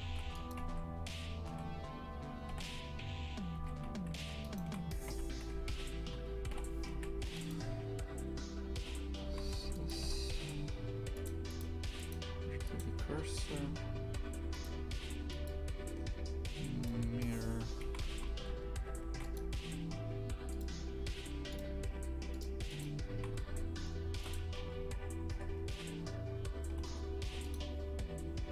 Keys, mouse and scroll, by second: 0.0 ctrl+r, 1.4 a, 4.4 alt+shift+right click, 5.0 v, 7.4 Delete, 9.2 shift+f, 10.0 Tab, 11.2 click, 12.7-17.8 drag, 17.8 shift+f, 20.9 click, 22.4 click, 23.2 shift+f, 24.6 s.